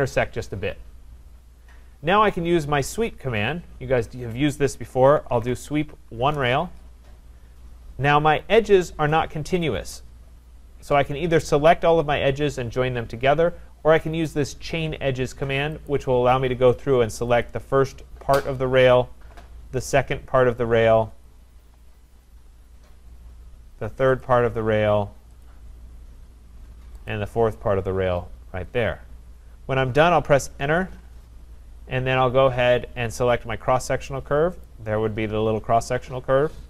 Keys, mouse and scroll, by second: 2.5 scroll, 2.6 middle click, 2.7 middle click, 2.8 middle click, 4.7-6.3 typing, 15.9-22.3 drag, 22.6-23.4 scroll, 24.2 click, 25.5 click, 27.1 click, 30.3 Return, 34.7 click.